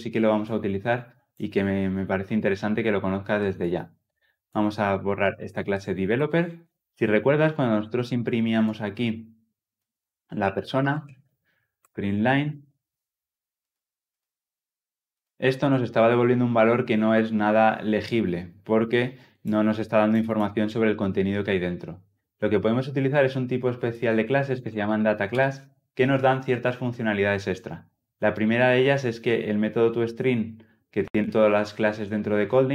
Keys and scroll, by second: 11.7 Return.